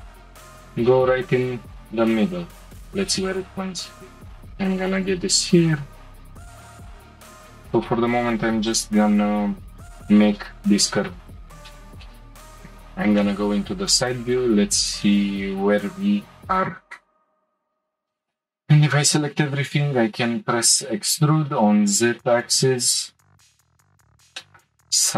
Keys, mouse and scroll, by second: 3.3 click, 4.9 click, 5.7 g, 7.8 ctrl+r, 11.9 middle click, 12.6-12.9 scroll down 1, 12.9-14.3 shift+middle drag, 14.3 click, 15.0 shift+middle click, 15.4-16.3 scroll up 2, 17.7 a, 18.1 a, 19.9 e, 24.4 shift+middle click, 25.0-25.1 scroll up 2.